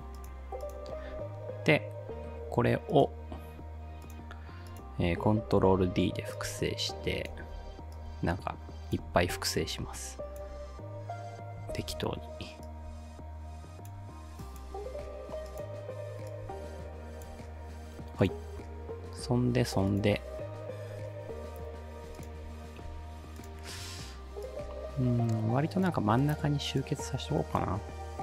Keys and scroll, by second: 5.7 ctrl+d, 7.6 ctrl+d, 9.3 ctrl+d, 11.7 ctrl+d.